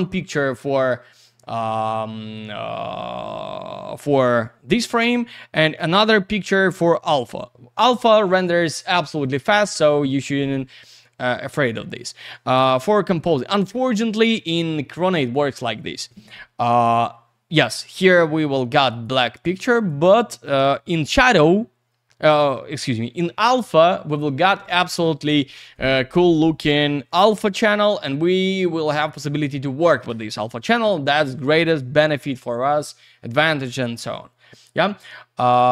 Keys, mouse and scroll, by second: 9.2 click, 10.5 click, 18.9 click, 19.7 click, 34.5 click, 35.5 click.